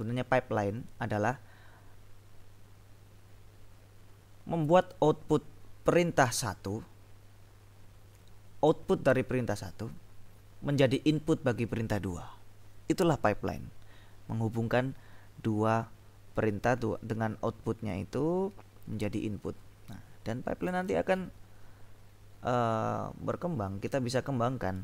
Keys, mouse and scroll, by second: 20.7 space.